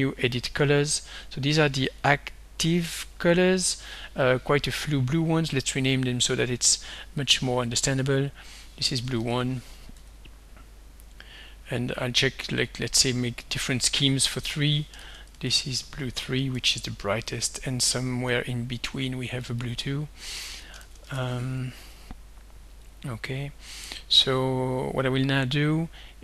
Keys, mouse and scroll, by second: 1.9 click, 3.0-4.4 drag, 5.6 click, 7.2 click, 8.7-10.0 typing, 11.2 click, 13.0 click, 13.5 click, 14.7-16.6 typing, 17.4 click, 19.5 click, 20.6-21.9 typing, 22.9 click.